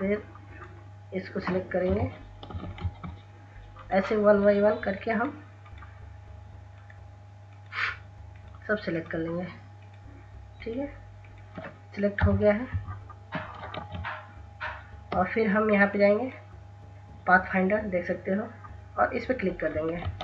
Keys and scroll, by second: 1.4 Delete, 2.1 ctrl+z, 11.8 Insert, 12.3 Delete, 13.4 ctrl+z, 20.1 ctrl+s.